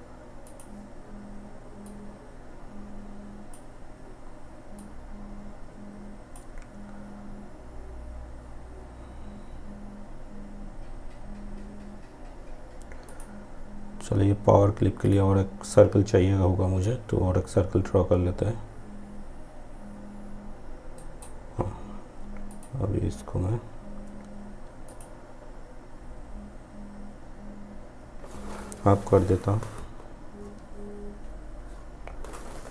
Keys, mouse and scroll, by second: 12.2-20.0 drag, 20.0 shift+right click, 21.5 click, 23.9 click.